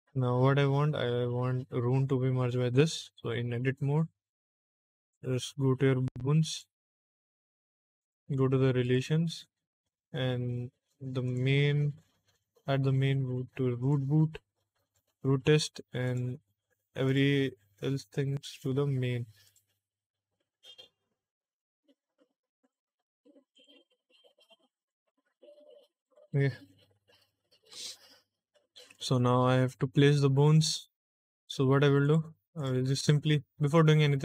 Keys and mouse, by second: 4.7 click, 6.4 click, 7.9 click, 8.7 click, 11.2 click, 12.2 click, 13.7 click, 14.8 click, 15.9 click, 17.0 click, 18.2 click, 19.3 click, 20.6 click, 21.5 click, 22.5 click, 23.4 click, 24.8 click, 25.9 click, 26.6 Tab, 27.0 Tab, 27.5 Tab, 28.8 click, 30.0 shift+middle click, 31.9 click, 32.5 click.